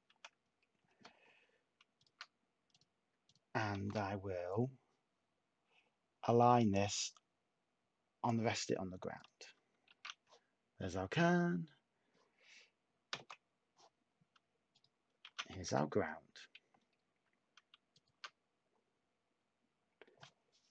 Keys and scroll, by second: 1.3 Tab, 3.7 a, 9.8 a, 13.0 s, 14.9-16.1 typing.